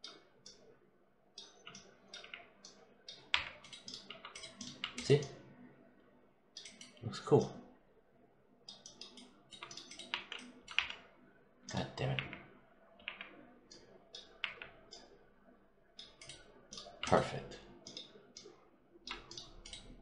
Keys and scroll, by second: 2.0 5, 9.9 1, 10.6 4, 12.0 5, 14.2 5.